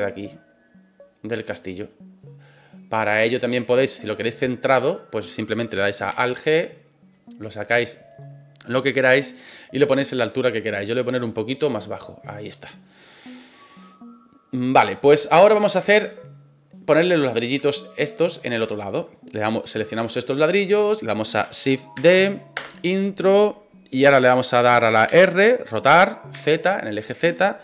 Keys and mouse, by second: 2.8 click, 4.8-5.4 middle drag, 6.1 alt+g, 7.1-8.7 drag, 9.3-12.3 drag, 13.2-13.5 middle drag, 13.9-15.9 middle drag, 16.7 right click, 17.8 shift+right click, 18.3 shift+right click, 21.9 shift+d, 22.5 Return, 25.0 r, 26.3 z.